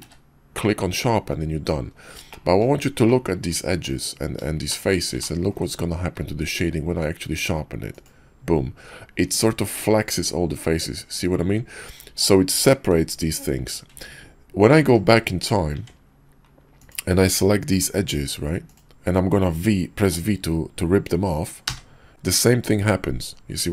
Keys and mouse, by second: 0.0 q, 3.0-3.5 shift+middle drag, 4.7 shift+middle drag, 5.2 ctrl+click, 6.9 q, 14.8 ctrl+z, 15.7 Tab, 21.7 v.